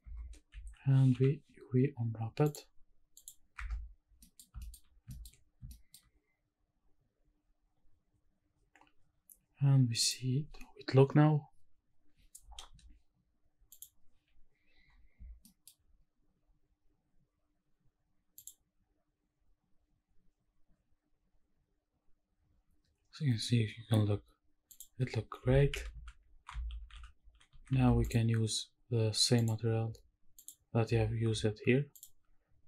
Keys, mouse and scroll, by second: 0.1 Tab, 0.6 a, 1.1 u, 3.6 Tab, 3.8-4.3 scroll down 4, 4.2 middle click, 4.6 shift+middle drag, 4.9 scroll up 1, 4.9 scroll down 1, 5.1 shift+middle click, 5.6 shift+middle drag, 10.4 click, 13.7 click, 15.0 scroll down 1, 15.4 shift+middle drag, 16.4 scroll down 1, 18.4 click, 24.8 drag, 25.6 shift+`, 29.4 click, 30.4 click.